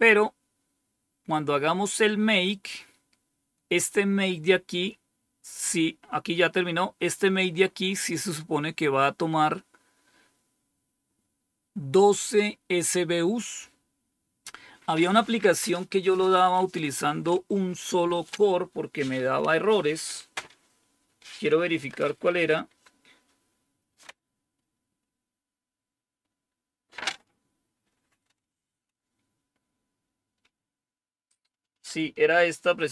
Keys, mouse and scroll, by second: 1.8-7.1 scroll down 1, 7.1-7.6 scroll up 2, 8.5 scroll up 1.